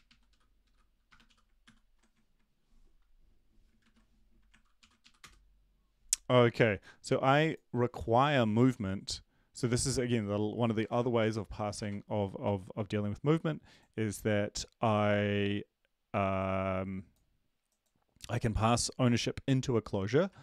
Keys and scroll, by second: 4.8 ctrl+l, 5.0 Up, 5.2 Return, 20.3 ctrl+`.